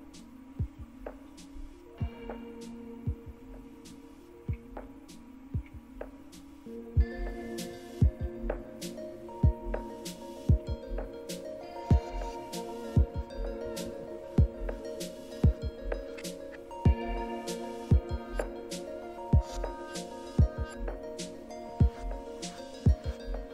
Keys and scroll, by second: 2.7 Up, 3.2 Up, 3.3 Up, 3.7 Down, 4.2 Down, 4.3 Down, 4.8-5.5 Down, 7.4 Down, 7.9 Down, 8.0 Down, 8.3-9.3 Down, 9.7-10.5 Down, 14.4-15.2 Down, 15.8-20.9 Down.